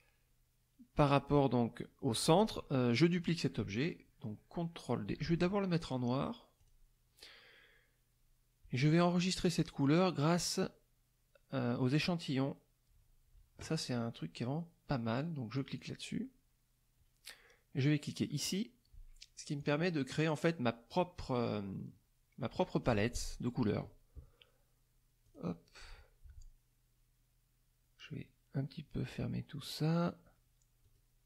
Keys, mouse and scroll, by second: 6.6 click, 15.6 click, 19.6 click, 22.8 click, 25.3 click, 29.6 click, 30.8 click.